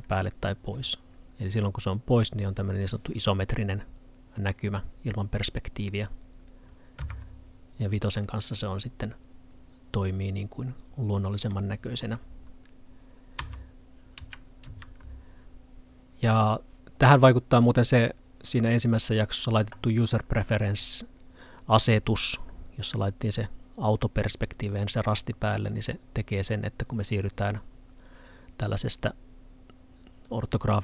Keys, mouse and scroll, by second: 1.9-6.1 scroll up 1, 8.3 middle click.